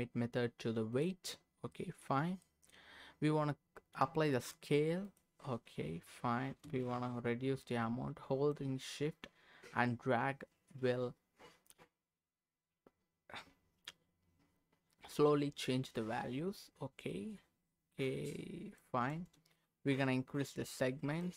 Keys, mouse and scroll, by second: 1.7 middle click, 2.2 scroll up 1, 2.4 middle click, 4.3 ctrl+a, 6.8-8.5 shift+drag, 17.1-18.9 shift+drag, 20.0-21.3 shift+drag.